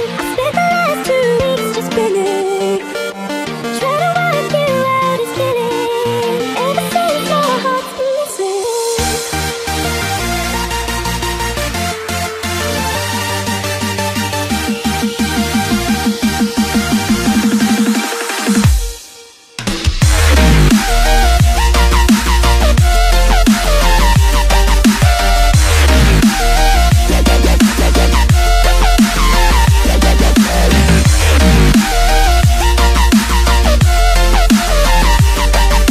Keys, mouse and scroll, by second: 7.9 click, 8.8-10.1 scroll down 4, 10.1-13.7 middle drag, 22.9 click, 24.7 s, 33.3 ctrl+z, 35.0 click, 35.6-35.9 scroll down 3.